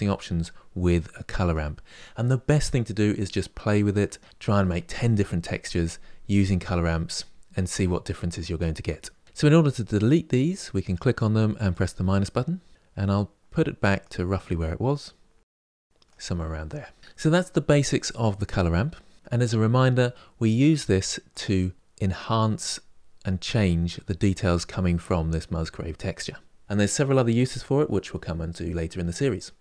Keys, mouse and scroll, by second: 10.6 click, 11.5-14.1 drag, 15.2-21.2 drag.